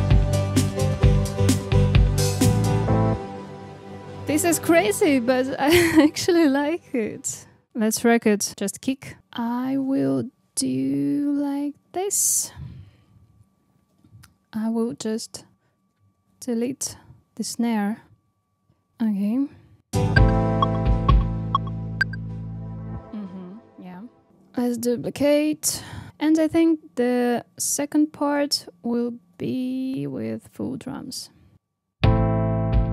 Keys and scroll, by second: 3.0 space, 9.2 super+e, 11.7 super+c, 13.7 super+v, 15.9 super+e, 16.2 super+x, 19.8 space, 22.9 space, 24.9 super+d, 27.8 super+c, 28.2 super+v, 29.2 super+d, 31.5 super+d, 31.9 space.